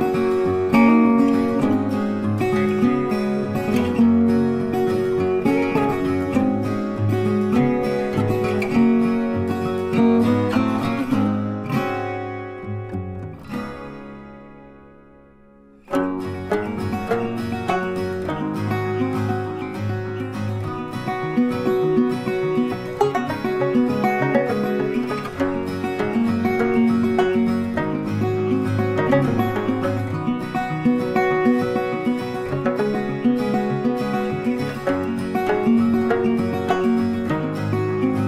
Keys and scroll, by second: 3.9 Delete, 5.3 ctrl+d, 22.6 ctrl+t.